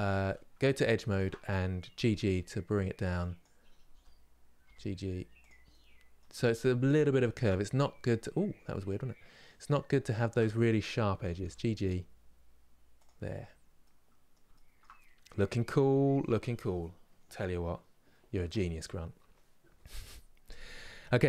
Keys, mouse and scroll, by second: 1.7 g, 5.4-6.9 middle drag, 7.7-9.8 middle drag, 9.8 alt+click, 10.9 g, 13.0 scroll down 3, 13.5-21.2 middle drag.